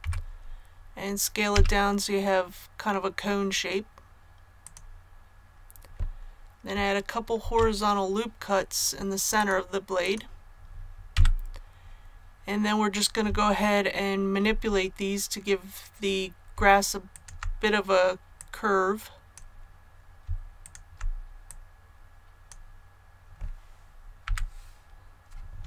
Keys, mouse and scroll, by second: 1.4 s, 4.5 click, 7.3 ctrl+r, 8.2-8.9 scroll up 1, 9.3 click, 11.0 a, 12.1-12.5 scroll up 1, 13.5 shift+middle click, 17.0 alt+right click, 18.3 click, 19.0 click, 20.5 alt+right click, 21.4-22.6 drag, 24.1 i.